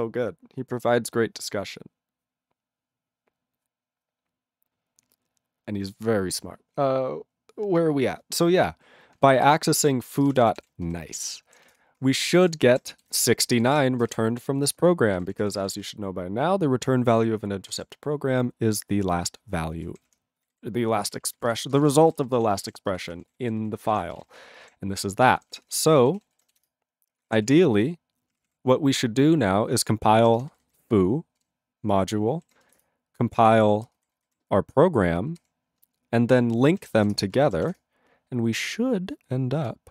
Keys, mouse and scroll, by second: 9.3 ctrl+e, 9.5 ctrl+space, 9.9 ctrl+alt+b, 10.0-11.1 typing, 11.3 ctrl+s, 11.8 Return, 12.2 ctrl+a, 12.3 ctrl+space, 12.4 ctrl+e, 12.4 ctrl+g, 13.2 Return, 13.4 ctrl+a, 13.6 ctrl+space, 13.6 ctrl+e, 13.7 ctrl+g, 14.0 ctrl+space, 14.1 ctrl+a, 15.2 ctrl+g, 15.3 ctrl+p, 15.4 ctrl+p, 15.6 ctrl+space, 15.6 ctrl+n, 15.8 ctrl+n, 15.8 ctrl+g, 17.7 ctrl+space, 17.8 ctrl+a, 19.8 ctrl+g, 20.0 ctrl+p, 20.1 ctrl+p, 20.4 ctrl+n, 20.5 ctrl+n, 20.9 ctrl+p, 21.1 ctrl+p, 21.2 ctrl+space, 21.2 ctrl+e, 21.4 ctrl+n, 21.4 ctrl+e, 21.5 ctrl+g, 21.7 ctrl+space, 21.8 ctrl+a, 21.8 ctrl+p, 22.0 ctrl+p, 22.0 ctrl+g, 22.1 ctrl+e, 22.3 ctrl+n, 22.3 ctrl+a, 22.6 ctrl+space, 22.6 ctrl+e, 22.7 ctrl+g, 22.9 ctrl+space, 23.0 ctrl+p, 23.1 ctrl+p, 23.2 ctrl+g, 23.3 ctrl+e, 23.5 ctrl+n, 23.6 ctrl+n, 23.9 ctrl+space, 23.9 ctrl+a, 24.1 ctrl+p, 24.1 ctrl+g, 24.2 ctrl+e, 24.2 ctrl+n, 24.4 ctrl+n, 24.6 ctrl+space, 24.6 ctrl+a, 25.2 ctrl+g, 25.4 ctrl+p, 25.6 ctrl+p, 25.6 ctrl+space, 25.7 ctrl+e, 25.7 ctrl+g, 26.2 ctrl+s, 26.7 Return, 27.5 ctrl+s, 28.3 ctrl+p, 28.4 ctrl+a, 28.5 ctrl+p, 30.3 ctrl+space, 30.4 ctrl+n, 30.5 ctrl+n, 31.4 ctrl+g, 32.9 Return, 33.5 ctrl+a, 33.9 ctrl+space, 34.0 ctrl+n, 34.1 ctrl+n, 35.4 ctrl+g, 37.1 Return, 37.8 Return.